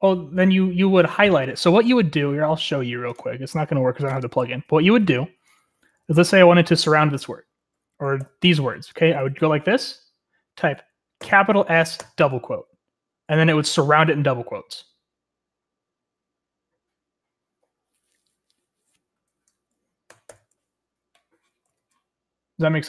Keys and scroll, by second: 4.4-6.7 typing, 8.0-9.1 typing, 11.3-12.5 typing, 20.1 Escape, 20.3 u.